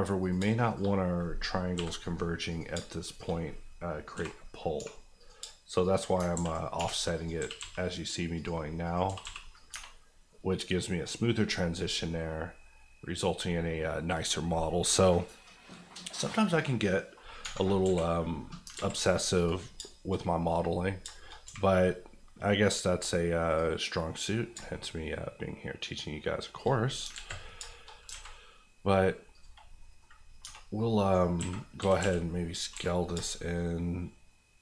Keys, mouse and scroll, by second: 0.2 click, 0.4 shift+click, 0.9 click, 1.7 j, 2.5 click, 2.7 shift+click, 3.2 click, 4.1 j, 4.7 j, 5.2 click, 5.4 shift+click, 6.1 click, 6.2 ctrl+click, 6.3 ctrl+x, 6.7 1, 7.1 click, 7.3 g, 7.5 g, 8.3 click, 9.0 g, 9.2 g, 9.5 click, 9.7 Tab, 10.0 scroll down 1, 10.3 middle click, 11.4 scroll down 1, 12.1 middle click, 13.2 scroll, 13.2 scroll down 1, 13.5 middle click, 14.4-17.4 scroll down 1, 17.8 KP_1, 18.7 alt+z, 19.3 click, 19.7 shift+click, 19.8 shift+middle click, 21.0 shift+middle click, 21.1 shift+middle click, 21.4 q, 23.5 click, 24.5-26.6 shift+drag, 27.0 alt+click, 27.1 alt+z, 27.4 scroll down 2, 27.7 shift+middle click, 28.1 alt+a, 28.3 middle click, 29.3 click, 29.8 middle click, 30.1-30.4 scroll up 1, 30.4 Tab, 30.6-31.4 scroll down 1, 31.4-32.7 typing.